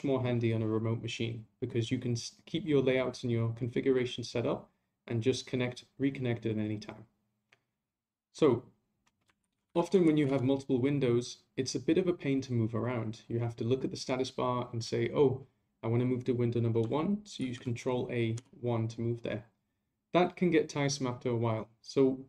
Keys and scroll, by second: 9.4 ctrl+a, 10.0 ctrl+a, 17.4 ctrl+a.